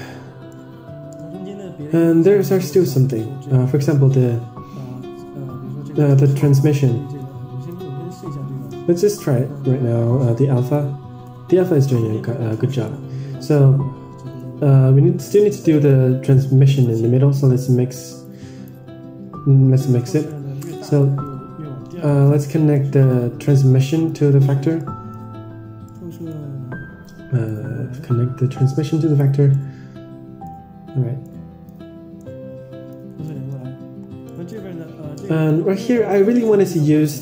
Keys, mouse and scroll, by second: 0.0 click, 0.8-1.2 middle drag, 1.2-1.8 scroll down 3, 2.3 Tab, 3.0-4.3 scroll up 5, 6.8 middle click, 7.6-11.1 drag, 12.0-12.8 scroll down 10, 12.8 middle click, 14.0 scroll up 3, 14.3 shift+a, 18.5-18.8 drag, 20.2-20.8 middle drag, 20.9 middle drag, 21.3-21.8 scroll down 5, 22.0 middle click, 22.2-23.0 scroll up 5, 22.7 middle click, 23.5-24.0 middle drag, 24.7 middle click, 25.8 middle click, 27.4-29.5 drag, 29.7-30.6 middle drag, 30.8-31.7 scroll up 5, 31.2-31.7 middle drag, 31.9 scroll up 2, 32.1 middle click, 33.1 middle click, 33.5-34.4 scroll down 8, 34.2 middle click, 36.4-37.2 middle drag.